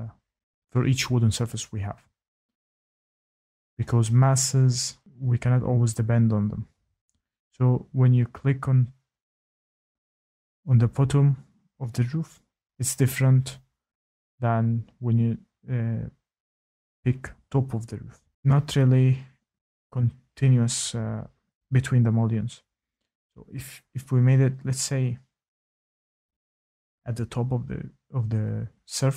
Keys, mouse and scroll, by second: 1.8 click, 2.1 click, 4.3 click, 6.9 click, 10.9 click, 17.1-17.9 scroll down 11, 17.9-18.3 scroll, 18.6 middle click, 18.8 middle click, 18.8 middle click, 18.9 middle click, 20.4 middle click, 24.7 ctrl+z, 25.5-26.0 middle click, 25.6 middle click, 25.9 middle click, 25.9 middle click, 26.5 middle click, 26.5 middle click, 26.6 middle click, 26.6 middle click, 26.6 middle click, 27.0 scroll, 28.9 click.